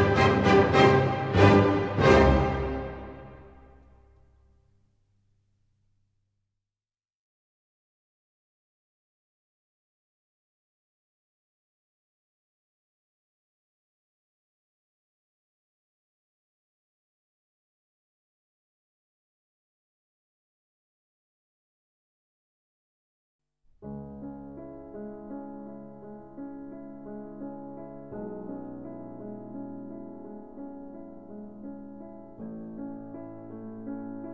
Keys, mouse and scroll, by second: 0.4 n, 2.6 scroll, 2.8 s, 3.5 middle click, 3.6 click, 5.2 click, 6.8 click, 7.2 ctrl+scroll up 3, 8.0-8.9 scroll up 6, 9.5 scroll, 11.0 click, 11.3 Escape, 13.2 s, 14.0 click, 15.4 click, 16.1 click, 17.0-18.9 typing, 22.8-23.9 drag, 24.3-25.5 drag, 26.6 click, 26.8 click, 28.6 typing, 29.4 Return, 31.8 click, 32.3-32.7 scroll, 33.9-34.3 scroll.